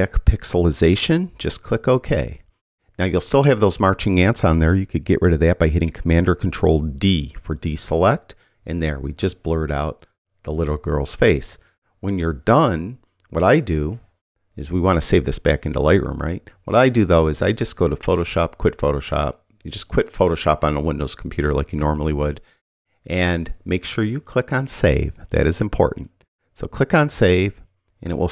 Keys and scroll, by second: 7.3 super+d.